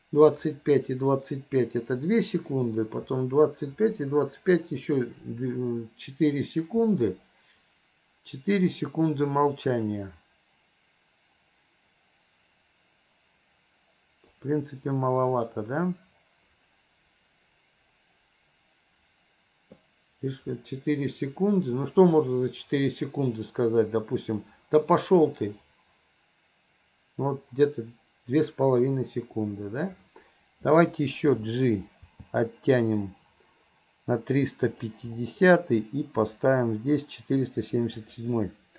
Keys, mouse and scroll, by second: 14.4-15.5 drag, 36.3 click, 38.0-38.7 drag.